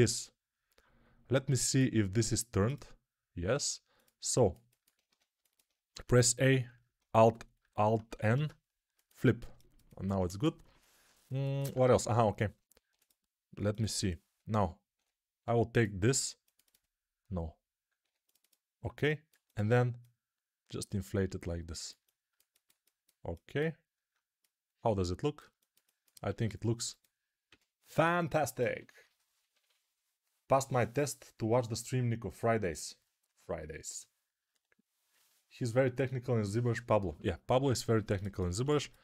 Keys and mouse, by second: 4.2-14.8 ctrl+alt+drag, 4.9 Tab, 5.8 a, 8.2 alt+n, 11.8 2, 12.7 2, 14.8-20.2 middle drag, 14.8 3, 15.3 2, 17.9 3, 20.2-27.4 drag, 26.2 q, 27.4-39.0 middle drag, 27.4 a.